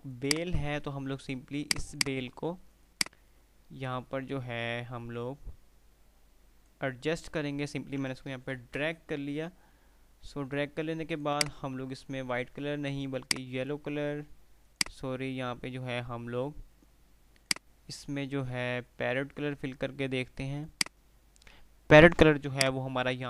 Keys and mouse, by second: 0.5 click, 0.9 F2, 1.8-7.0 drag, 8.8 shift+Page_Up, 11.2 click, 17.5 click, 20.9 click, 23.2 F2.